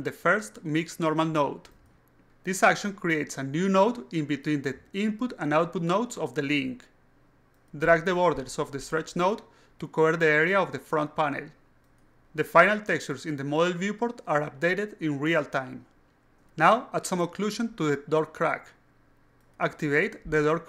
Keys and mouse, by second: 0.4-1.5 drag, 7.5 click, 8.5 click, 9.1-9.7 drag, 10.0-10.4 drag, 10.9-11.6 alt+drag, 12.2 alt+click, 14.5 click, 20.6 click.